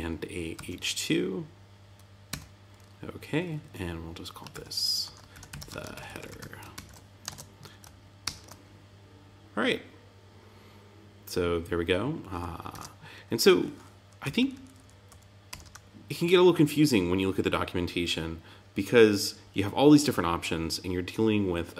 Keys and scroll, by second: 2.2 Tab, 4.6 Tab, 5.3 shift+t, 5.9 shift+h, 6.7 super+s, 7.2 super+Tab, 12.7 super+Tab, 14.2 Down, 15.0 Up, 15.4 Return.